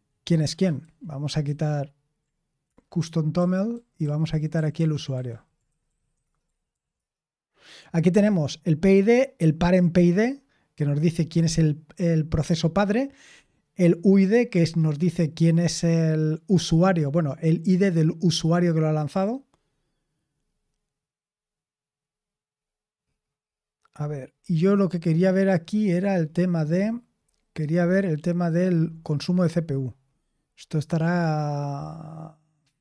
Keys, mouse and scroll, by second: 0.8 ctrl+p, 1.4 ctrl+n, 2.6 Return, 3.3-7.0 typing, 6.2 Return, 28.6-29.7 scroll up 1, 29.7-31.0 scroll up 1, 31.0-32.8 scroll up 1.